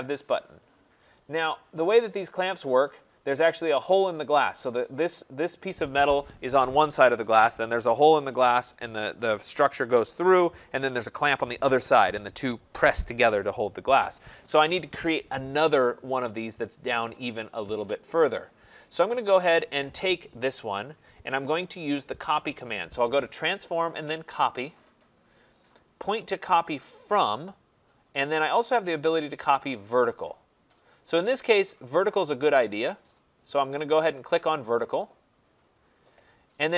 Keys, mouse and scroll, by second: 0.2 click, 0.7-1.6 scroll, 2.4 right click, 2.6-4.8 scroll, 22.8 click, 24.4 click, 34.7 click.